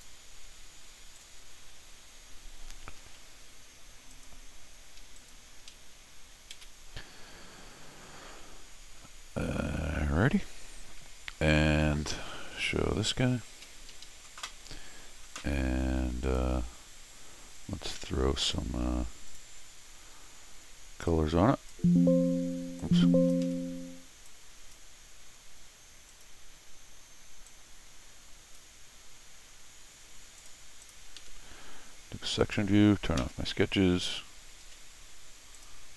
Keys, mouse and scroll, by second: 1.2 click, 4.1 click, 5.2 click, 6.5 shift+s, 8.0 scroll down 2, 12.8 shift+Tab, 13.9 Escape, 14.0 Escape, 16.2 click, 18.4 click, 19.3 click, 21.1 click, 22.8 click, 23.4 Escape, 24.3 click, 26.1 click, 27.5-28.5 drag, 30.4 click, 30.8 click, 31.2 Escape, 32.4 click, 35.5 click.